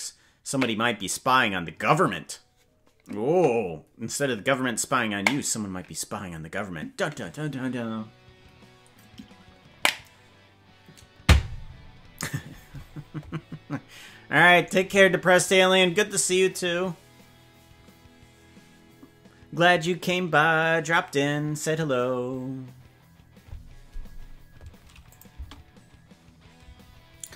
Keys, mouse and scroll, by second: 25.1 click, 25.3 space, 26.7 space.